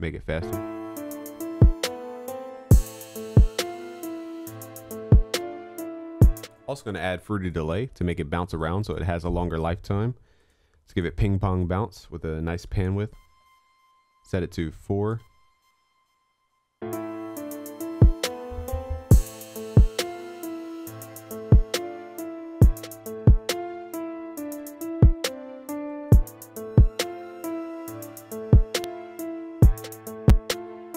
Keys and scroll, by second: 5.0 ctrl+s.